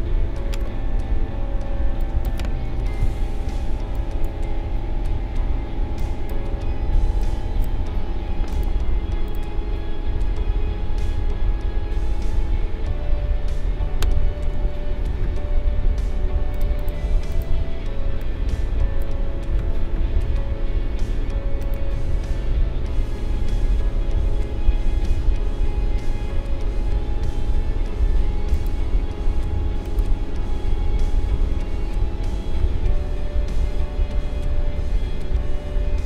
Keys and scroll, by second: 1.1 2, 3.0 2, 5.1 1, 14.5 ctrl+z.